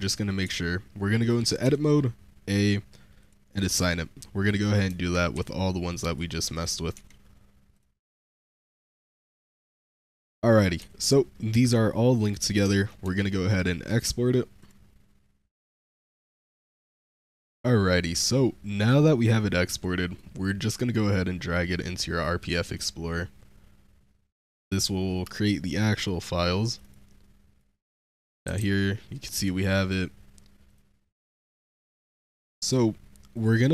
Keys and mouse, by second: 0.3 z, 1.5 a, 3.0 click, 3.6 Tab, 4.3 click, 4.7 Tab, 5.2 a, 5.9 click, 6.4 click, 6.8 Tab, 7.6 click, 7.9 Tab, 8.4 a, 9.6 click, 10.0 Tab, 10.7 z, 11.2 middle click, 12.2 click, 12.6 shift+drag, 12.9 v.